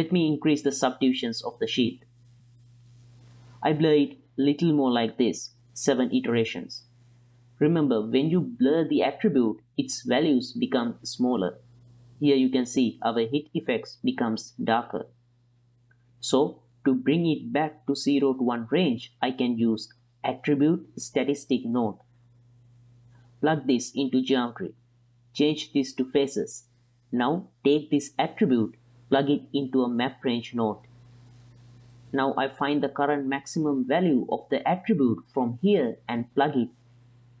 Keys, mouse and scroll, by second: 0.1 ctrl+click, 0.7 click, 1.7 click, 1.9 ctrl+click, 2.2-3.5 drag, 3.8 ctrl+click, 4.0 click, 4.2 ctrl+click, 4.5 click, 4.9 ctrl+click, 5.1 click, 5.3 ctrl+click, 5.6 ctrl+click, 6.1 click, 6.4 click, 9.1-9.5 ctrl+middle drag, 9.7-11.5 middle drag, 11.9 ctrl+middle click, 13.4 click, 14.5 middle click, 15.4 ctrl+middle drag, 16.0 middle drag, 17.7 middle click, 18.4-23.3 drag, 23.5 ctrl+middle click, 24.1-24.7 drag, 24.9-25.9 right drag, 26.1 ctrl+middle click, 27.6-28.5 drag, 28.8 click, 29.4 click, 29.8 click, 30.1-32.6 drag, 35.9-37.4 drag.